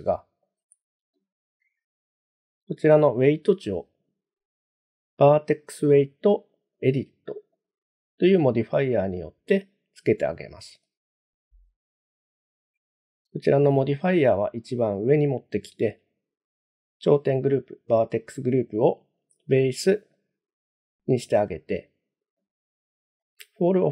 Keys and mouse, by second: 0.0 middle click, 3.0-7.7 drag, 10.8-12.6 drag, 18.8-20.3 drag, 23.2 click.